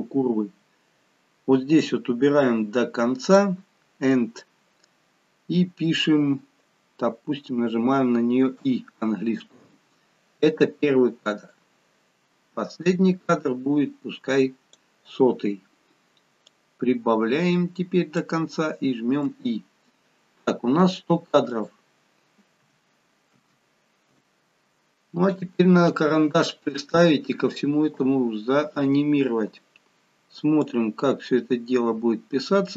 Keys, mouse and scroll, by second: 0.5 scroll down 4, 1.8 click, 11.5 click, 16.5 click, 19.3 i, 21.4 click, 23.4 0, 28.7 click, 30.6 click.